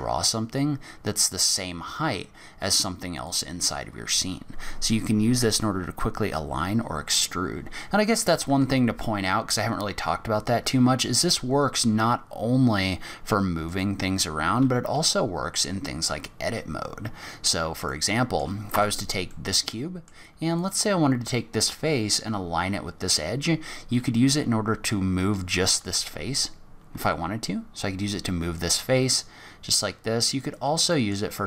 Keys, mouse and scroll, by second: 6.6-7.3 scroll down 1, 7.3-8.4 scroll up 2, 8.4 Tab, 13.6 click, 14.4-15.5 scroll up 5, 15.5 scroll down 4, 15.8-17.9 scroll up 4, 17.9 middle click, 18.7 Tab, 19.3 middle click, 20.5 click, 24.2 g, 30.9 middle click.